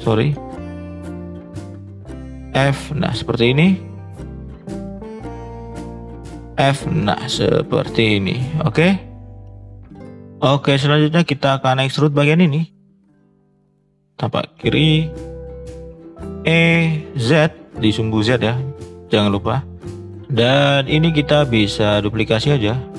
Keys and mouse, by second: 0.0 ctrl+z, 1.1 click, 2.6 f, 3.0 click, 3.5 middle click, 4.0 click, 5.5 click, 6.4 f, 6.9 click, 7.3-8.8 middle drag, 9.0-9.3 middle drag, 10.2 middle click, 11.3 shift+middle click, 11.9 drag, 12.4 middle click, 13.4 click, 13.9 shift+middle click, 16.2 e, 18.8 middle click, 19.9 middle click, 20.0 middle click, 20.9 click, 21.5 click, 21.9 shift+click, 22.3 shift+click, 22.7 shift+click.